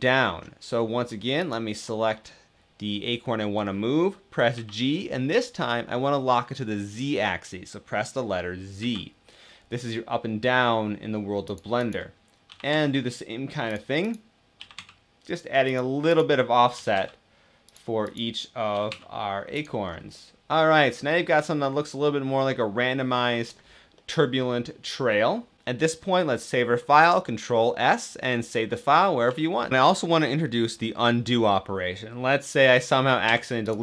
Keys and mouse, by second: 4.2 g, 8.5 z, 11.2 click, 11.5 click, 12.2 g, 12.4 g, 12.7 z, 14.3 g, 14.3 z, 15.4 click, 15.8 click, 16.4 z, 16.6 g, 18.4 z, 18.6 g, 19.2 g, 19.2 z, 19.8-20.2 drag, 20.2-21.0 middle drag, 21.0-21.7 drag, 21.7-23.2 middle drag, 23.9-25.6 middle drag, 33.0 x.